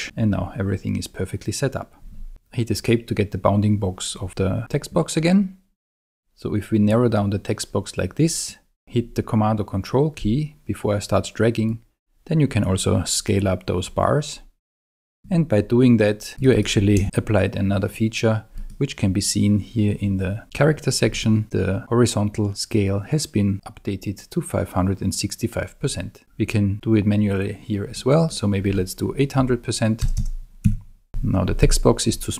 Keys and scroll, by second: 29.4 8, 30.0 0, 30.6 Tab, 31.1 Escape.